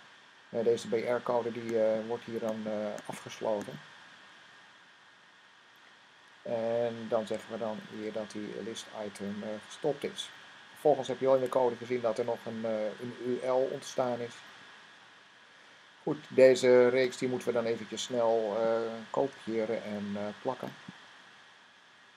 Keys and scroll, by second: 7.7 typing, 8.7 typing, 11.2 typing, 19.1 c, 21.8-22.1 typing.